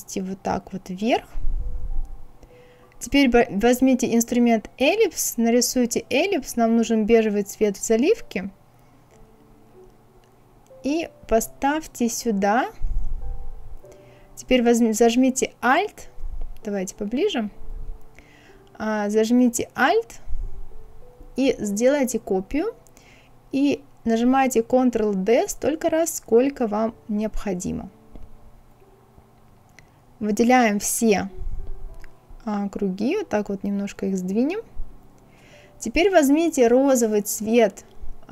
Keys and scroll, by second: 24.3 ctrl+d, 25.5 ctrl+d, 26.3 ctrl+d, 31.7 Left, 32.4 Left, 32.9 Right, 33.5 Left.